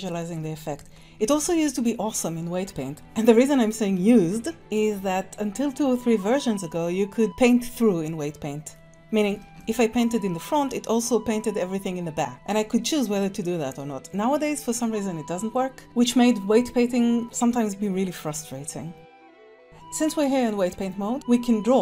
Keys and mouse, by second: 0.0 shift+click, 0.5 click, 1.3 ctrl+s, 4.6 click, 9.3 middle click, 16.9 middle click.